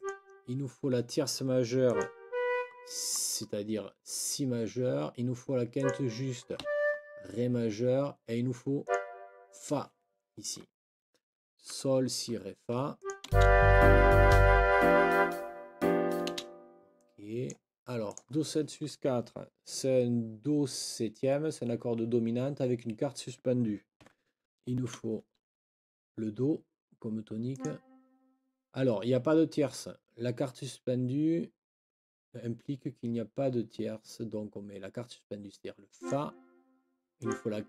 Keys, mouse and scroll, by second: 1.9 click, 2.2 Up, 5.8 click, 6.6 Up, 8.8 click, 11.7 Escape, 13.0 click, 13.3 space, 16.3 space, 16.9 click, 17.3 click, 17.5 click, 18.1 click, 24.0 ,, 24.9 KP_7, 27.5 click, 35.9 click, 37.1 click.